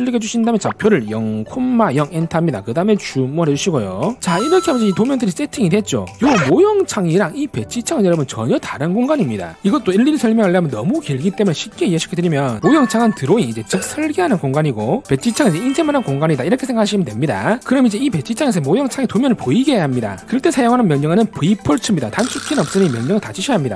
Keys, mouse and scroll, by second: 0.5 click, 3.0 z, 3.4 a, 6.9 click, 8.1 click.